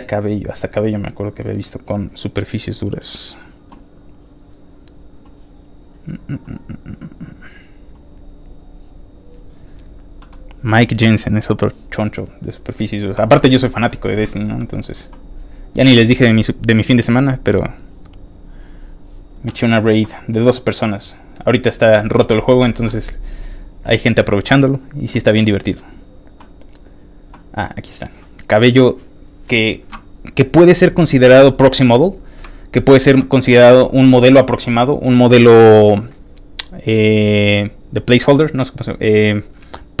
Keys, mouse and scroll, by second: 1.4 scroll down 2, 2.3-2.6 scroll down 2, 4.3 middle click, 6.0 middle click, 6.8-7.6 scroll down 3, 7.6 middle click, 10.2 middle click, 14.3 middle click, 14.3 scroll down 1, 14.8 middle click, 16.1 scroll down 2, 23.5 scroll down 1, 24.3 scroll down 1, 25.1 scroll down 1, 26.0 middle click, 26.2 scroll down 1, 27.0 scroll down 1, 27.6 click, 30.5 click, 31.6 click, 32.1 click, 32.4-32.8 scroll down 2, 32.8-40.0 scroll up 2.